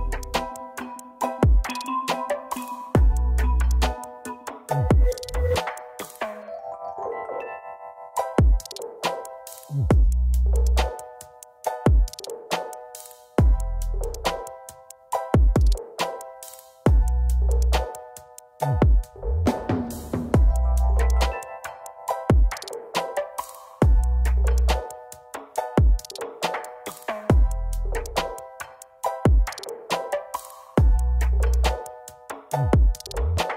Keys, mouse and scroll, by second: 3.1 ctrl+space, 6.7 scroll down 1, 8.7 double click, 9.8 z, 11.1 z, 11.3 ctrl+space, 12.2 Down, 12.4 Down, 12.5 Down, 12.7 Down, 13.4 double click, 13.9 right click, 15.6 ctrl+z, 16.3 double click, 29.0 typing, 30.1 ctrl+space, 31.3 double click.